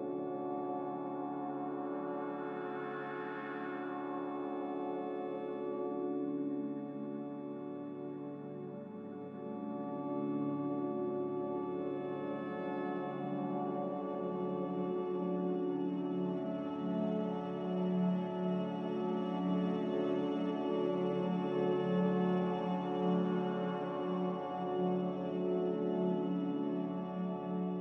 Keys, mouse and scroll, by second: 0.0-0.4 typing, 1.6 a, 3.2 ctrl+z, 3.4 ctrl+z, 5.9 typing, 6.1 Return, 7.1-7.9 typing, 9.3 x, 12.8-13.6 typing, 15.6 typing, 15.8 Return, 17.2 a, 17.8 z, 22.6 5, 24.5 Return.